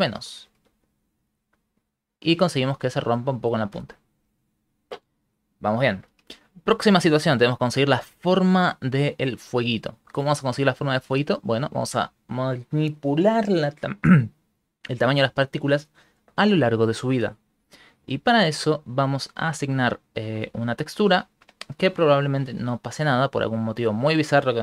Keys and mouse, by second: 0.0 Right, 0.3 Right, 0.5 Right, 0.7-1.2 Right, 1.3 Right, 1.5 Right, 1.7 Right, 2.1 Right, 2.3-3.3 Right, 3.4 Right, 3.7 Right, 5.0 shift+middle click, 6.9 shift+middle click, 8.2 shift+middle click, 11.0 shift+middle click, 18.9 middle click, 19.5 click, 20.1 middle click, 22.5 shift+middle click, 23.3 middle click.